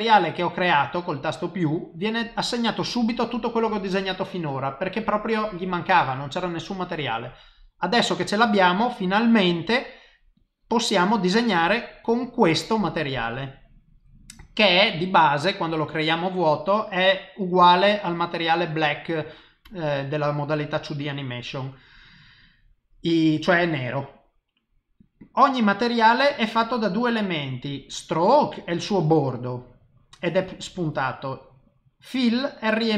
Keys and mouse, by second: 10.4 click, 12.5 click.